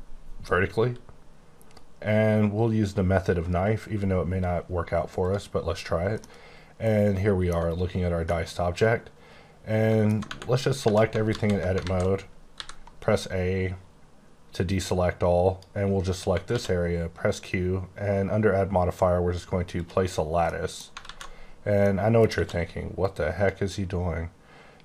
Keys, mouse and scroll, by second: 0.4-2.0 scroll up 5, 2.0-3.9 scroll down 5, 5.2 click, 6.2 middle click, 8.2 middle click, 10.2 Tab, 10.6 scroll up 2, 10.8 1, 11.2 alt+z, 11.8 alt+a, 12.5 b, 13.0 click, 16.4 q, 19.7 click, 20.5 middle click, 21.0 z, 21.4-21.8 scroll down 1, 21.8 middle click, 22.3 q, 23.0 click.